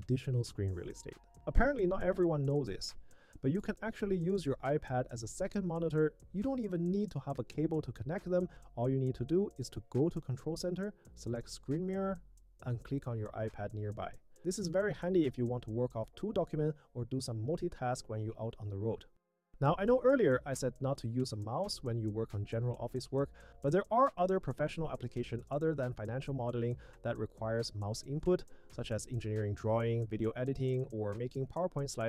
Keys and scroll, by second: 18.2 super+1, 25.0 Tab, 25.5 Tab, 26.1 Tab, 26.7 Tab, 27.8 Down, 28.4 Down, 30.9 Down.